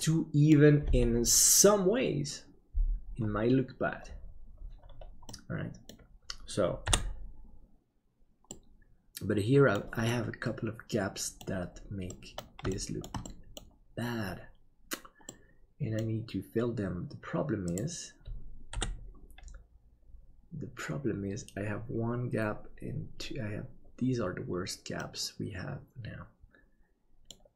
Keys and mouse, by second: 0.1 middle click, 5.4 middle click, 6.8 KP_7, 8.6-9.9 middle drag, 10.2-11.4 middle drag, 12.2 middle click, 12.8 shift+middle click, 13.4 middle click, 15.4-16.4 middle drag, 18.7 KP_7, 24.9-27.3 middle drag.